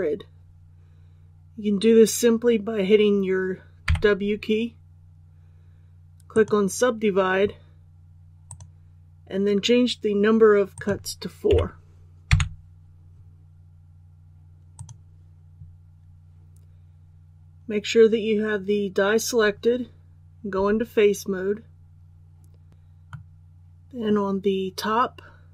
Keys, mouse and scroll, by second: 3.8 w, 6.3 click, 11.5 KP_4, 14.7 click, 20.5 3, 22.7 click, 23.1-24.6 middle drag.